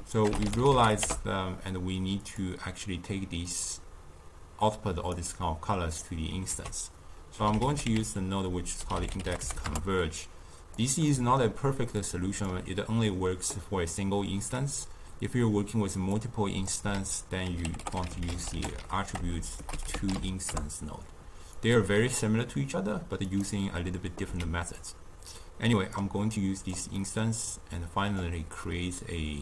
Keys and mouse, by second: 3.4 drag, 5.3-6.4 middle drag, 6.4 ctrl+a, 11.0-11.9 middle drag, 11.9 click, 16.0-16.8 drag, 16.8 ctrl+a, 17.7 t, 19.2 BackSpace, 19.3 BackSpace, 23.2 click, 24.2 x, 24.7-26.3 drag, 26.9-27.4 middle drag, 27.4-28.5 drag, 28.5-29.4 middle drag.